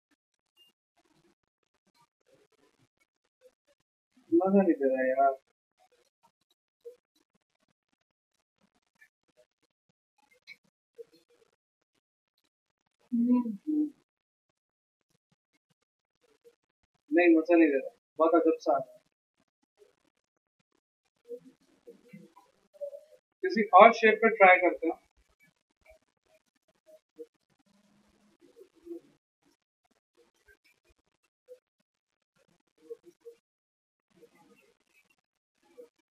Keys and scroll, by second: 1.1 ctrl+alt+x, 2.7 ctrl+alt+c, 4.3 ctrl+alt+z, 5.4 ctrl+z, 7.7 t, 9.2 ctrl+a, 9.3 ctrl+c, 10.6 ctrl+v, 11.0 Escape, 15.8 ctrl+alt+c, 17.4 ctrl+z, 17.7 ctrl+z, 22.1 v, 25.0 p, 28.1 x.